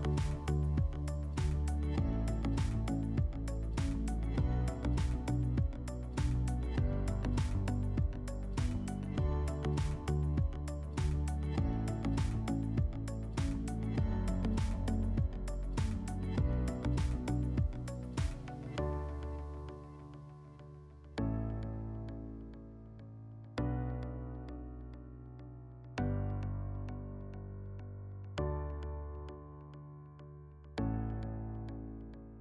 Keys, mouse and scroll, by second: 1.1 click, 3.0 click, 5.0 click, 6.5 click, 10.2 click, 10.9 alt+w, 12.1 alt+w, 13.7 alt+middle click, 15.5 click, 16.3 ctrl+click, 17.1 ctrl+click, 18.0 ctrl+click, 19.0 ctrl+click, 20.2 ctrl+click, 21.2 alt+middle click, 24.5-25.5 drag, 27.7 click, 30.9 click, 31.4 click.